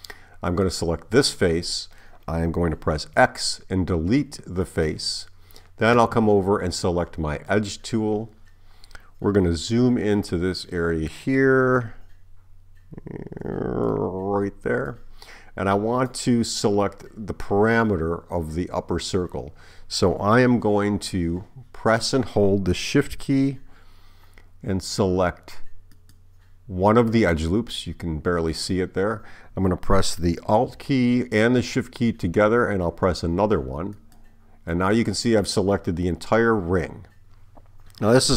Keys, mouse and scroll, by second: 0.5 click, 3.2 x, 7.5 click, 15.7 right click, 25.9 shift+click, 34.0 alt+shift+click.